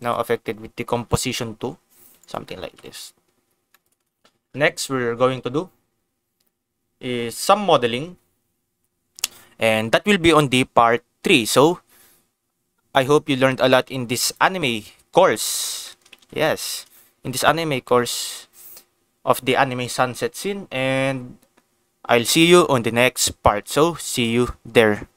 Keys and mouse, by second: 0.0 click, 0.3 g, 2.2 right click, 2.6 ctrl+s, 2.9 click, 3.7 shift+middle click, 4.2 ctrl+s, 9.1 ctrl+s, 14.3 click, 15.8 shift+middle click, 16.2 ctrl+s, 16.5 shift+middle click, 17.8 shift+middle click.